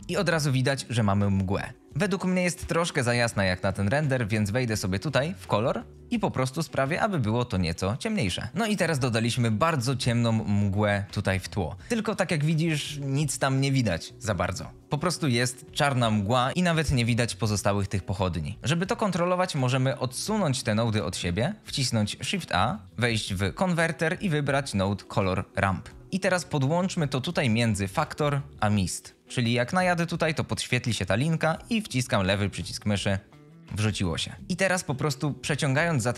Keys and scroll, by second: 1.7 ctrl+space, 18.5 alt+v, 22.2 shift+a.